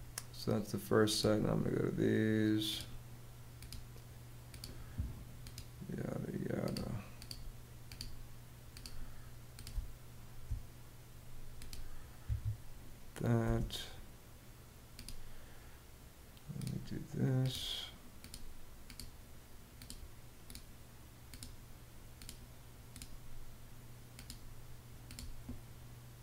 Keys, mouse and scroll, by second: 9.2 space, 11.8 Escape, 12.9 space.